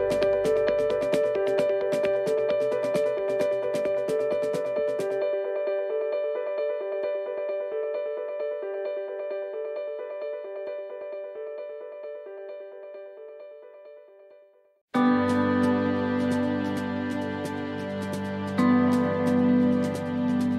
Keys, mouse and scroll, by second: 0.0 right click, 1.2 click, 2.7 middle click, 3.7 middle click, 4.9 click, 8.3 right click, 8.7 shift+middle click, 10.5 click, 12.2 right click, 13.4 click, 14.7 right click, 15.9 click, 17.3 middle click, 18.9 middle click, 20.3 right click.